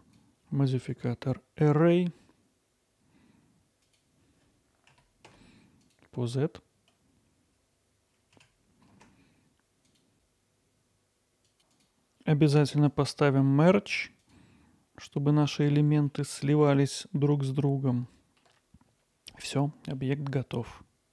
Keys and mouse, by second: 0.2-8.5 drag, 8.6 middle click, 8.9 middle click, 10.1-11.6 drag, 11.7-16.4 drag, 17.0-18.4 alt+middle drag, 20.5-21.1 middle drag.